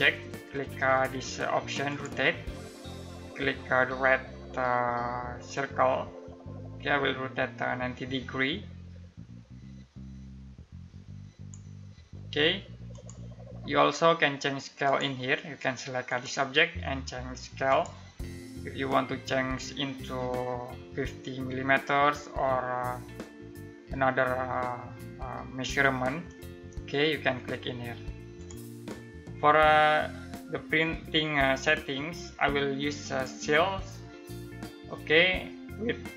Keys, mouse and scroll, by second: 1.4 click, 5.1-11.1 drag, 27.9 click, 31.2 click.